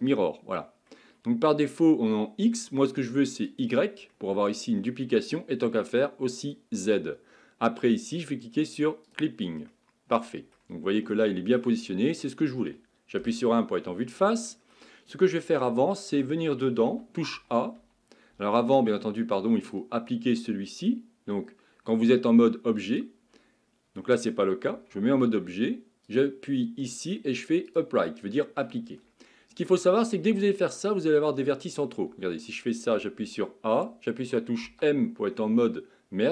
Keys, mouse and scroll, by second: 0.9-3.5 middle drag, 3.5 click, 4.1-6.4 middle drag, 6.4 click, 9.1 click, 9.7-13.2 middle drag, 13.2 KP_1, 14.3-15.6 shift+middle drag, 15.6 Tab, 16.2 Tab, 16.9 a, 17.4 a, 22.9-24.7 drag, 24.7 Tab, 26.1-29.1 drag, 32.1 Tab, 33.2 a, 34.6 m.